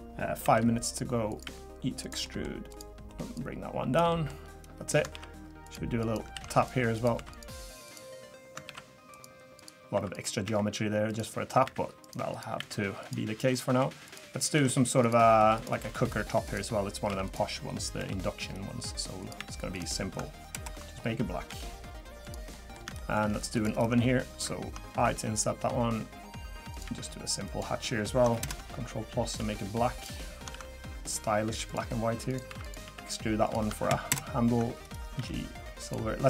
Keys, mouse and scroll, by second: 0.4 i, 1.4 e, 2.2 middle click, 2.7 click, 3.3 click, 4.1 middle click, 4.4 scroll up 2, 5.1 ctrl+r, 6.3 ctrl+r, 7.1 3, 7.3 click, 7.8 click, 8.6 ctrl+r, 9.9 3, 10.1 click, 10.4 e, 11.6 e, 12.3 click, 12.6 e, 13.3 scroll down 1, 13.5 middle click, 14.0 click, 14.5 ctrl+r, 15.8 middle click, 16.1 scroll down 1, 16.4 click, 17.2 click, 18.0 i, 19.4 e, 20.5 ctrl+KP_Enter, 21.5 g, 22.5 middle click, 22.9 shift+middle click, 23.5 click, 25.6 i, 26.8 e, 28.4 ctrl+KP_Add, 29.4 g, 30.5 ctrl+r, 32.5 3, 32.6 click, 32.8 e, 34.1 ctrl+KP_Enter, 35.1 g.